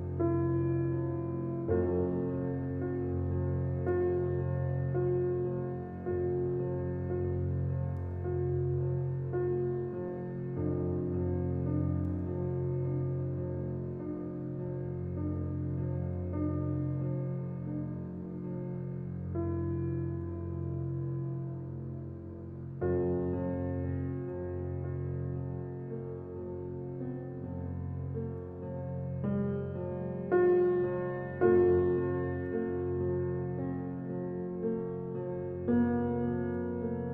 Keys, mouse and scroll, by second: 2.4-3.9 scroll down 1, 3.9-6.8 middle drag, 6.8-7.5 scroll down 2, 7.6 click, 10.0-11.6 drag, 12.5 click, 13.2 click, 14.8 click, 16.1 click, 17.5 s, 19.7 s, 23.3 alt+middle click, 25.1 x, 25.7 shift+a, 27.2 g, 28.2 alt+middle click, 28.7 s, 30.8 click, 31.5 KP_0, 32.6 click, 33.3 click, 35.4-35.8 scroll up 1, 35.8-36.6 scroll down 2, 36.6 n.